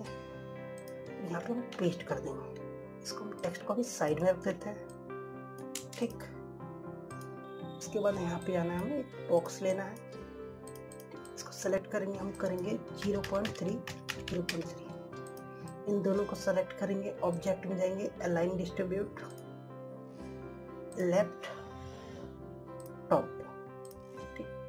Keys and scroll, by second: 0.1 ctrl+c, 2.4 ctrl+v.